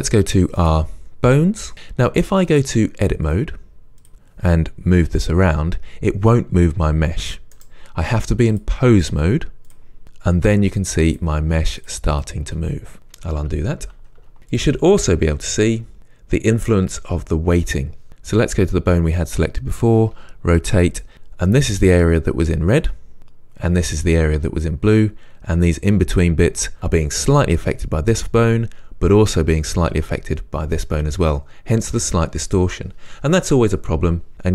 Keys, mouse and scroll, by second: 2.5-4.1 drag, 5.0 g, 7.7 right click, 8.6-10.8 drag, 10.0 r, 11.1 click, 11.5 r, 12.2 click, 12.5 r, 13.8 click, 14.2 scroll down 1, 14.4 scroll up 1, 14.6 click, 15.4 r, 16.0 scroll up 1, 18.1 click, 18.7 scroll up 1, 20.2 r, 21.0 click.